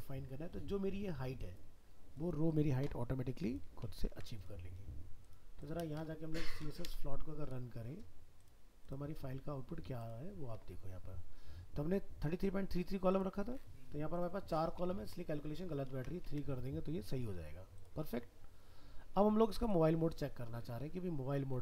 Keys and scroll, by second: 4.1 ctrl+s, 15.9 ctrl+s, 16.3 alt+Tab.